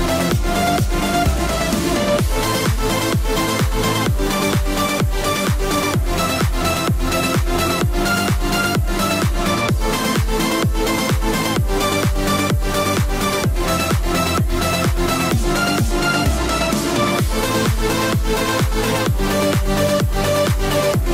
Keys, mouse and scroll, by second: 0.0 click, 1.5 middle click, 2.3 click, 5.5 middle click, 7.3-7.6 scroll down 1, 7.6 middle click, 11.3 click, 13.8-15.2 scroll up 1, 15.2 click, 17.2 F2, 17.3 click, 19.1 middle click, 19.9 click.